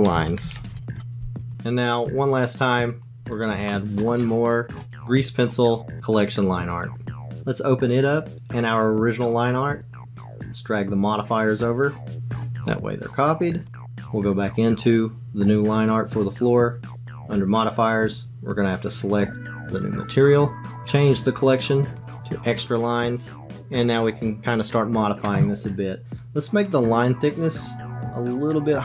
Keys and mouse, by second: 1.5 click, 3.7 shift+middle click, 4.8 shift+a, 10.5 click, 13.6 click, 14.0 click, 17.2 click, 19.0 click, 22.0 click, 27.8-28.8 drag.